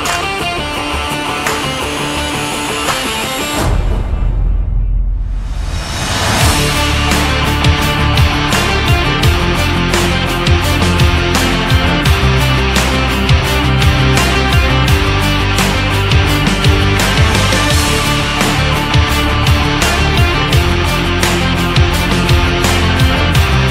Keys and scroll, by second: 23.3 Up.